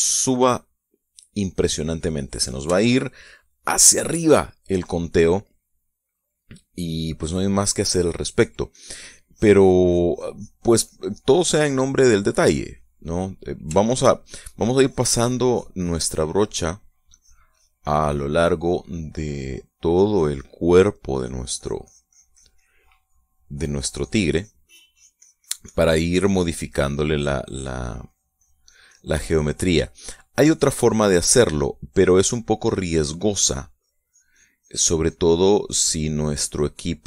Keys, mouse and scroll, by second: 3.4 shift+click, 4.4 shift+click, 5.5 shift+click, 6.8 click, 7.7 click, 8.1 click, 12.8 click, 13.6-14.7 middle drag, 15.0 click, 16.9 click, 17.6 click, 21.2 click, 21.8-24.8 drag, 24.9-27.2 drag, 27.2 middle click, 28.0 middle click, 28.6-30.2 drag, 30.2 middle click, 31.0-32.0 drag, 32.1-33.8 middle drag, 34.2-37.0 drag.